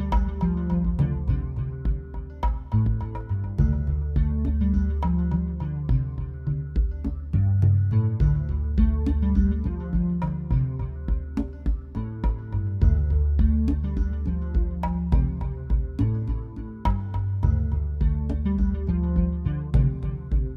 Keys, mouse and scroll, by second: 0.2 click, 4.1 click, 7.6 click, 11.6 click.